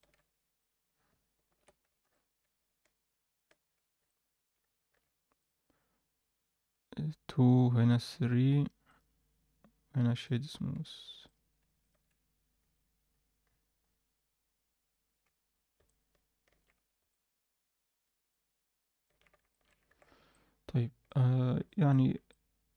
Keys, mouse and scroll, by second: 0.6 click, 1.5 ctrl+l, 1.8 g, 3.6-3.9 scroll down 2, 3.7 Tab, 4.0-4.4 middle drag, 4.6 scroll up 1, 4.9 alt+a, 5.3 click, 6.7 click, 7.4 click, 8.8-10.4 right drag, 10.4 scroll up 2, 10.7 Tab, 11.2 click, 11.8 shift+click, 12.6 s, 15.4-16.0 scroll down 2, 15.8 middle click, 16.7 Tab, 17.1-18.0 alt+middle drag, 18.3-19.0 alt+middle drag, 19.5 alt+shift+middle drag, 19.8 alt+a, 20.3-21.0 middle drag, 21.2-21.9 scroll up 2, 21.6 alt+middle click, 22.3-22.7 alt+middle drag.